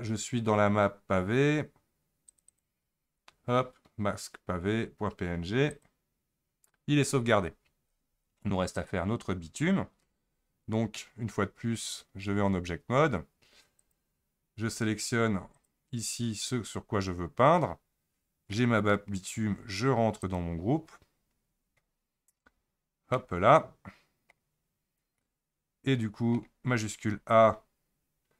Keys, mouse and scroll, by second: 8.8 click, 12.3 Tab, 13.8 click, 15.5 ctrl+click, 18.5 middle click, 19.1-20.2 scroll up 2, 20.2 click, 20.8-21.4 scroll down 10, 21.8-22.3 scroll down 7, 22.3-23.2 scroll up 7, 23.2-24.6 middle drag, 24.6-25.2 scroll down 2, 25.2-27.1 middle drag, 27.1 shift+a.